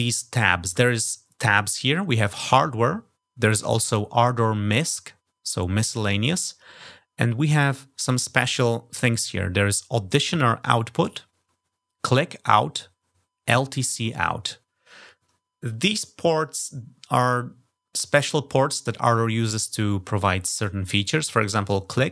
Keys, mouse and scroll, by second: 4.5 click.